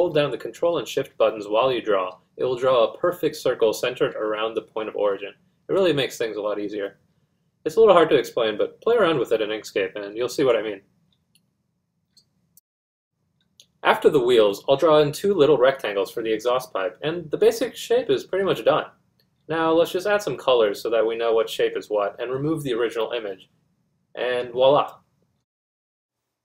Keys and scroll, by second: 10.3 Caps_Lock.